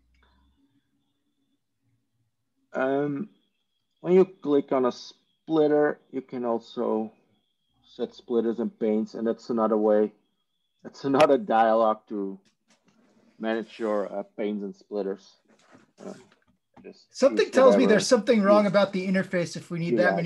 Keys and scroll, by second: 3.5 ctrl+e, 10.7 ctrl+e.